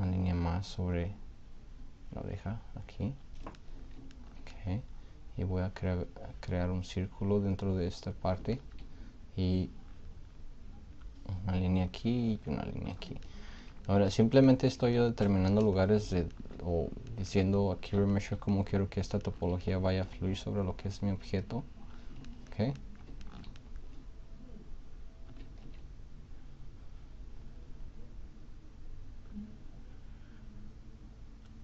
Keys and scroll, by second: 25.6 ctrl+z.